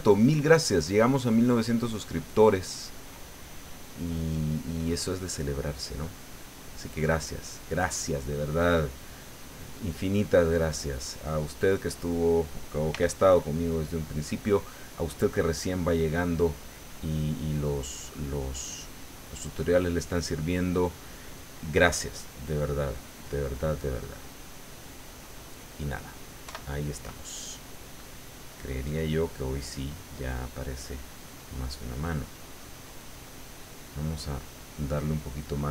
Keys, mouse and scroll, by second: 3.8-5.6 middle drag, 5.9-6.9 middle drag, 6.9-7.6 scroll up 1, 7.6-8.7 middle drag, 9.3 click, 11.6 click, 12.9 f, 13.3 click, 13.7-14.9 drag, 17.0 middle click, 17.9-21.2 drag, 21.9 click, 23.8 middle click, 24.7-25.7 middle drag, 25.8 middle click, 26.4 KP_1, 27.5-28.5 middle drag, 28.6-30.2 middle drag, 30.4 middle click, 31.2 middle click, 32.3 middle click, 33.2 middle click, 34.4 right click, 34.8 click, 35.5 click.